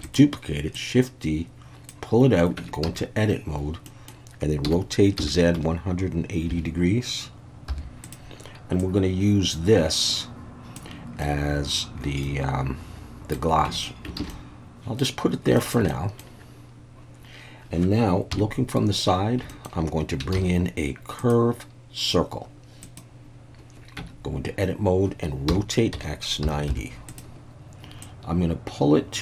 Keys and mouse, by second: 0.0 click, 0.8-1.9 drag, 2.6 Tab, 2.8 a, 3.8 middle click, 4.6 r, 5.2 z, 5.5 1, 6.5 8, 7.7 0, 8.0 click, 8.8-10.8 drag, 11.2 middle click, 12.2-13.3 middle drag, 13.7 Tab, 14.2 alt+a, 14.3-15.0 middle drag, 15.6 shift+middle click, 15.9-16.2 middle drag, 18.3 KP_3, 19.5 shift+middle click, 20.3 shift+a, 24.0 Tab, 25.5 r, 25.9 x, 26.4 9, 26.7 0, 27.1 click, 28.0-29.2 drag.